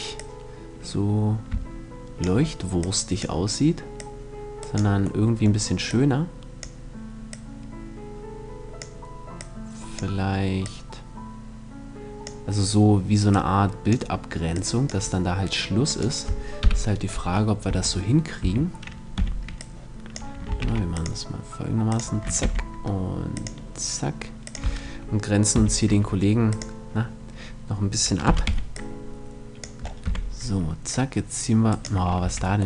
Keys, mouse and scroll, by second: 1.4 scroll up 1, 2.3-5.4 drag, 5.0-6.1 middle drag, 5.4-8.6 drag, 8.9-12.0 drag, 12.8-16.0 drag, 15.4 right click, 16.1 KP_7, 17.2 Tab, 18.0 a, 18.7 b, 20.1 ctrl+r, 21.5-23.2 drag, 21.9 ctrl+r, 24.1-25.4 drag, 25.0 b, 27.8 z, 28.0 b, 29.6 z, 29.8 middle click, 30.4-32.2 drag, 31.8 c.